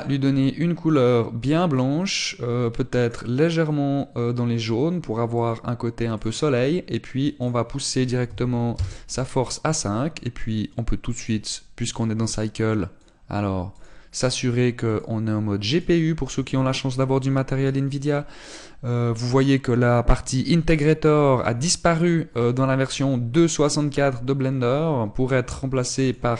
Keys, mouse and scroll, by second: 1.8 click, 5.5 click, 9.6 click, 10.7 middle click, 12.0 click, 15.2 click, 16.7 click, 23.4 click.